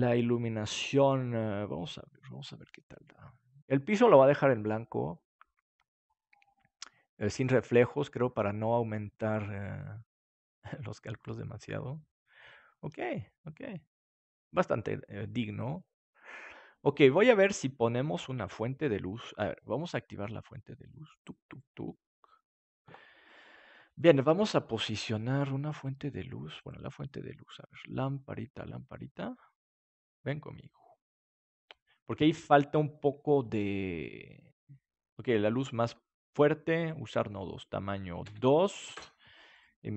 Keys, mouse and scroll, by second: 18.1 ctrl+s, 20.5 click, 21.4-23.3 drag, 24.1-28.8 drag, 28.8-31.7 middle drag, 33.4-39.5 drag, 36.7-39.5 middle drag.